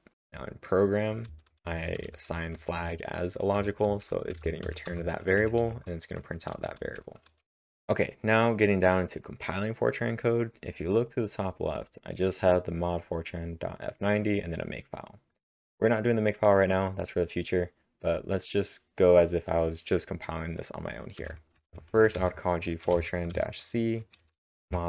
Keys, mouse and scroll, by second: 0.0-5.4 typing, 18.4-22.1 drag, 20.9-22.2 typing, 23.3-24.8 typing.